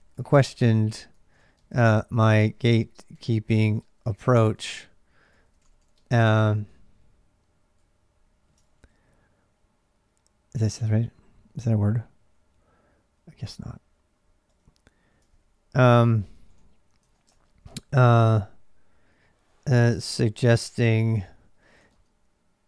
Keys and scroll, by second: 0.0-22.6 typing, 14.3 Return, 15.1 ctrl+[.